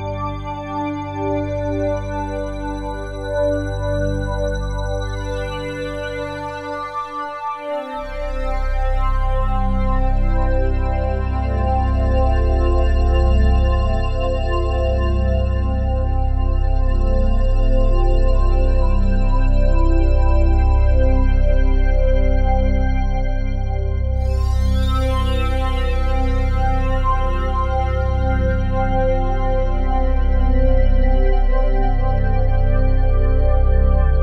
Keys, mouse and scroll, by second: 0.0 click, 2.5 Tab, 2.5-6.4 typing, 8.4-13.2 typing, 15.8 Tab, 18.6-19.3 typing, 20.0-21.0 drag, 21.0 Tab, 21.9 ctrl+a, 22.6-23.1 typing, 24.1 Tab, 25.2-25.8 typing, 27.6 Tab, 27.6 typing, 28.4-31.5 ctrl+alt+drag, 31.3-32.6 typing.